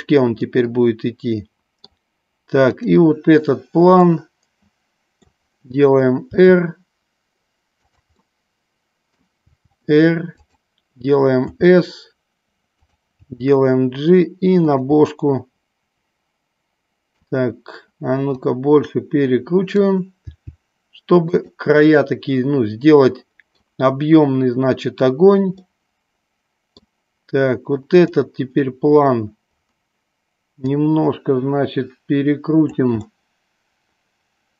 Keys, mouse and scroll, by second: 0.5-2.1 middle drag, 2.8 click, 4.1-5.4 middle drag, 6.4 r, 8.0 click, 8.4 middle click, 9.6 r, 11.6 s, 13.0 click, 13.4 g, 15.1-17.4 middle drag, 18.2-20.0 drag, 20.3 g, 21.4 click, 22.0-24.0 middle drag, 25.6-26.2 middle drag, 26.5 middle click, 30.7-32.9 drag, 33.1-34.5 middle drag.